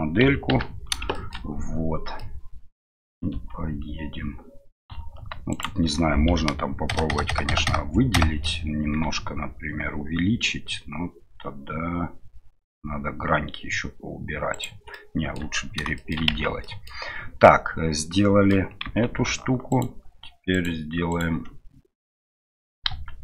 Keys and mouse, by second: 1.1 shift+middle drag, 3.3 Tab, 6.9-8.4 ctrl+KP_Add, 9.0 s, 14.9 middle click, 15.9 shift+middle click, 16.3 Tab, 16.6 middle click, 17.4-18.5 middle drag, 20.5 right click, 21.1 right click, 22.9 KP_1.